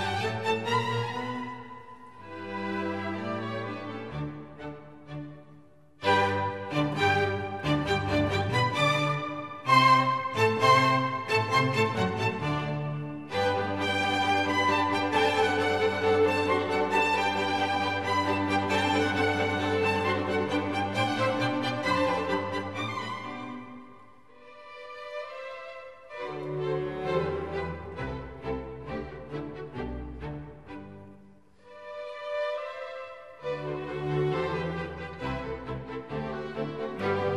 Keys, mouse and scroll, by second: 4.1 double click, 13.3-14.9 scroll down 18, 14.9-15.3 scroll up 5, 15.3-16.3 scroll down 16, 16.4-18.8 scroll up 27, 18.8-19.1 scroll up 1, 31.9-32.8 scroll down 12, 34.2-34.8 scroll down 2.